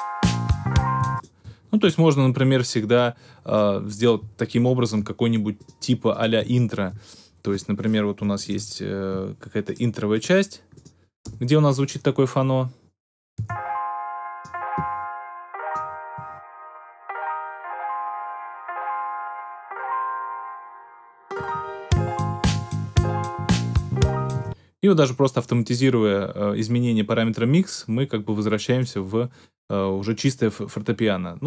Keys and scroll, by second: 0.9 space, 8.1 BackSpace, 11.2 BackSpace, 13.3 space, 24.3 space.